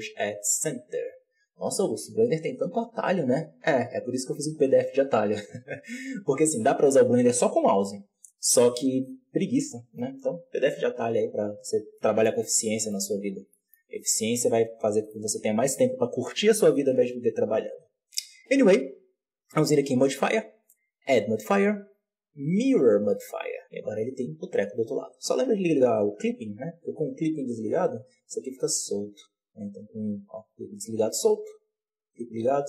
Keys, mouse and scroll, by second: 5.5-6.2 scroll down 1, 6.2-9.4 scroll down 6, 11.5-11.9 scroll down 2, 11.9-12.4 shift+middle drag, 12.4 Tab, 12.6-12.9 middle drag, 12.9 z, 13.4 shift+middle drag, 13.7-14.3 scroll up 1, 14.3-15.0 shift+middle drag, 15.0-15.8 scroll up 1, 15.8-16.7 scroll up 1, 16.7-17.8 scroll up 1, 17.8 scroll up 1, 19.7-20.7 drag, 22.6-26.8 drag, 26.8 Tab, 27.6 right click, 27.9 g, 29.7 click, 30.3 g, 31.8 click, 32.3 g.